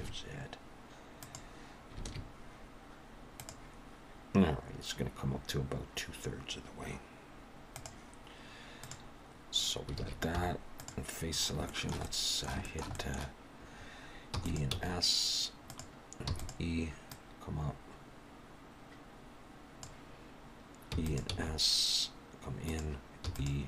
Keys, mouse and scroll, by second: 2.0 alt+a, 8.8 click, 10.0 alt+a, 10.4 3, 10.8 click, 11.4 scroll up 1, 11.7 shift+middle click, 12.0 middle click, 12.6 shift+middle click, 12.9 middle click, 14.3 e, 14.7 s, 16.3 e, 17.1 click, 20.9 e, 21.4 s, 23.3 e.